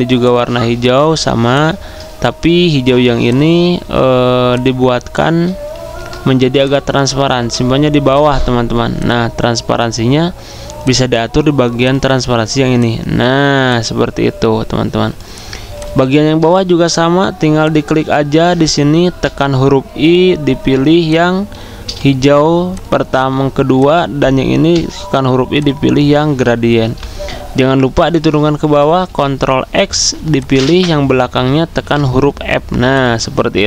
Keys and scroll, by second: 5.7 ctrl+x, 7.3 ctrl+f, 19.1 i, 21.6 v, 24.6 i, 26.8 v, 28.9 ctrl+x, 31.7 ctrl+f.